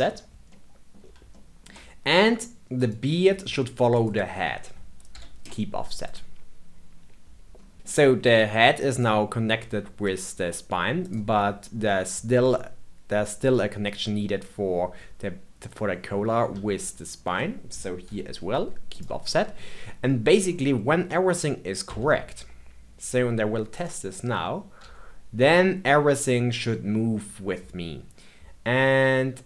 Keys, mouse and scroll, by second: 0.5-2.7 middle drag, 2.7 click, 3.9 shift+click, 5.0 ctrl+p, 7.5 scroll down 2, 7.7-8.3 middle drag, 8.3 click, 8.8 click, 10.0 shift+click, 11.0 click, 11.3-15.6 middle drag, 16.8 shift+click, 18.0 ctrl+p, 19.4-20.4 scroll down 2, 20.4-21.8 middle drag, 21.8 Tab, 23.7 click, 24.8 g.